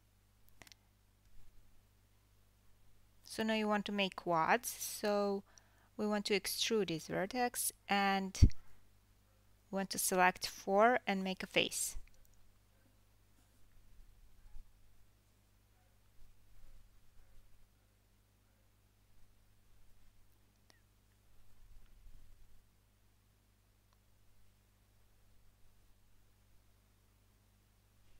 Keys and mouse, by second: 5.2 3, 7.9 1, 8.4 click, 8.5-14.0 middle drag, 9.6 e, 14.0 shift+drag, 14.3-14.8 middle drag, 14.5 f, 14.8-15.3 drag, 15.3-16.5 middle drag, 16.0 f, 16.5-17.0 drag, 17.0-28.1 middle drag, 17.9 2, 18.4 f, 18.6 f, 22.1 3, 22.4 click, 25.3 1, 25.9 click, 26.7 g.